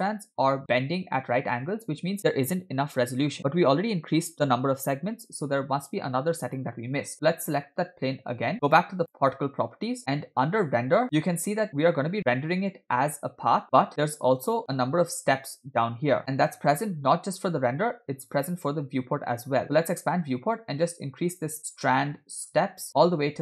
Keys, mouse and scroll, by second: 1.5-1.9 scroll down 2, 6.5-7.4 drag, 8.7 click, 9.7 click, 10.0-10.4 scroll down 6, 10.8-11.5 scroll down 4, 11.0 click, 18.4-18.7 drag, 18.8-20.3 scroll down 3, 21.3 click, 22.5 click.